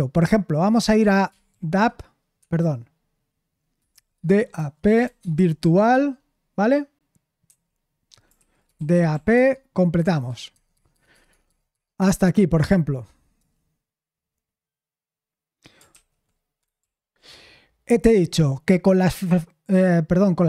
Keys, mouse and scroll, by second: 3.9-6.1 typing, 8.2-9.6 typing, 10.5 Tab, 10.7 Tab, 10.9 Tab, 11.4 Tab, 11.7 Tab, 16.8 ctrl+p.